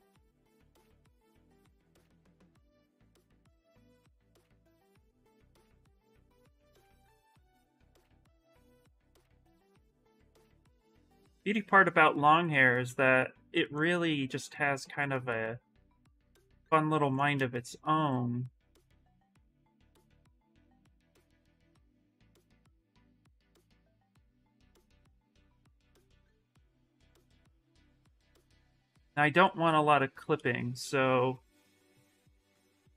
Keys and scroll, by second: 1.8 q, 3.0 s, 5.8 s, 15.6 s, 21.1 s, 22.6 ctrl+z, 23.3 ctrl+z, 23.5 ctrl+z, 26.1 ctrl+z, 27.0 ctrl+z, 28.3 s.